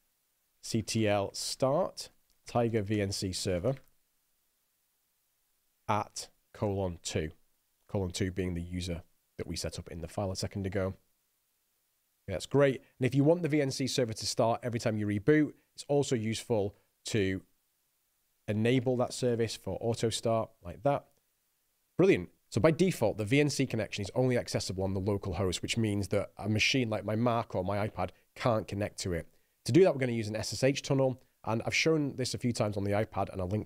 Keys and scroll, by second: 0.0-4.7 typing, 6.2 shift+2, 6.9 shift+;, 7.3 2, 11.6 Return, 16.6 ctrl+p, 17.3 alt+b, 18.3-20.3 typing.